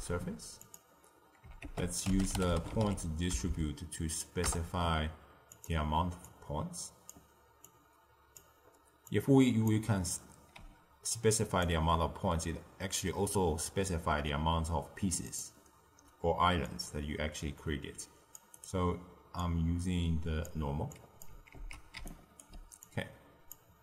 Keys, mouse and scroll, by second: 1.6 ctrl+a, 3.4 Down, 6.1 click, 7.6 drag, 9.0 click, 10.5 d, 11.0 d, 11.1-11.6 drag, 11.6 d, 11.6 d, 15.2 click, 16.6 click, 19.3 click, 20.9 drag, 21.5 ctrl+x, 21.9 d, 22.0 right click, 22.4 d, 22.8 click.